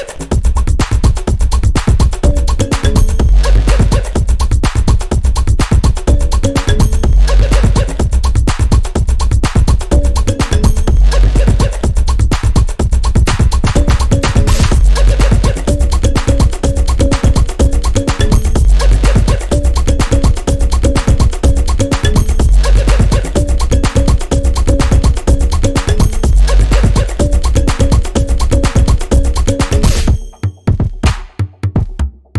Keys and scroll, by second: 0.6 ctrl+b, 14.3 F9, 16.6 space.